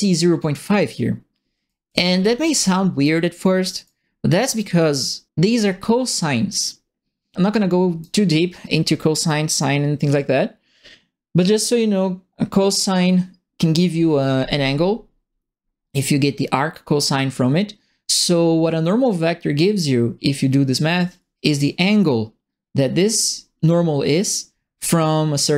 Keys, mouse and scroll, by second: 1.6-3.0 right drag, 1.8 w, 2.4 s, 3.8 right click, 7.3 right click.